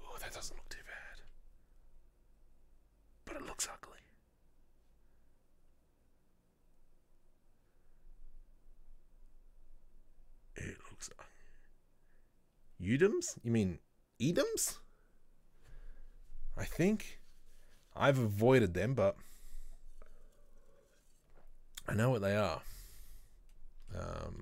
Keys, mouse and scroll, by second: 16.0 scroll down 1, 23.4 scroll down 1, 23.6-24.4 middle drag.